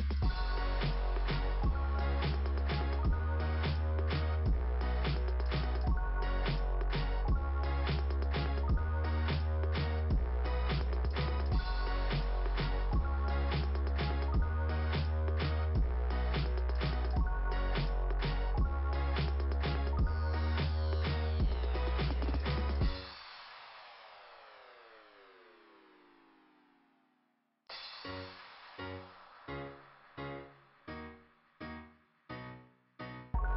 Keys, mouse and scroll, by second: 1.8 alt+], 1.9-3.5 typing, 5.7 ], 6.9 click, 7.1 click, 7.3 click, 9.9 click, 10.1 click, 15.8 click, 16.1 click, 19.3 click, 19.4 click, 19.5 click, 19.7 click, 19.8 click, 22.4 click, 22.7 click, 23.1 click, 23.2 click, 26.4 click, 26.5 click, 27.8 click, 31.7 click.